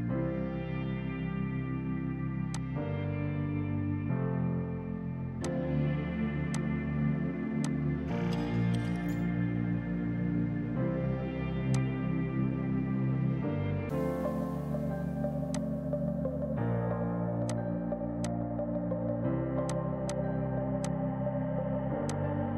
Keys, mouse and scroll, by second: 0.7 Delete, 5.5 click, 11.8 click.